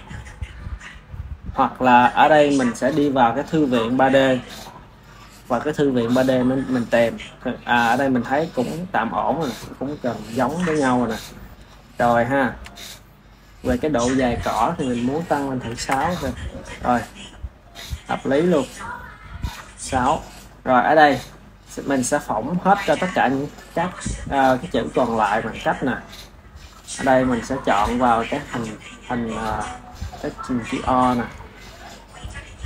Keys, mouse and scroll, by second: 7.4-10.4 middle drag, 10.4 KP_1, 11.8-13.4 shift+middle drag, 13.4 click, 14.7-17.7 drag, 18.4-19.3 ctrl+middle drag, 19.3 ctrl+s, 19.6 ctrl+s, 22.5-23.7 middle drag, 23.7 KP_1, 25.0-25.8 shift+middle drag, 25.8 click, 27.7 click, 30.7-32.6 shift+middle drag.